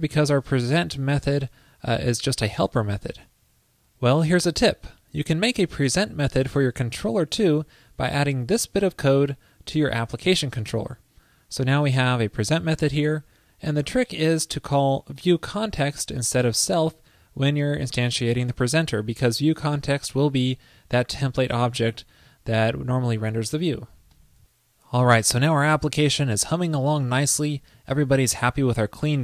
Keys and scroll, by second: 0.0 alt+Right, 8.4 super+v.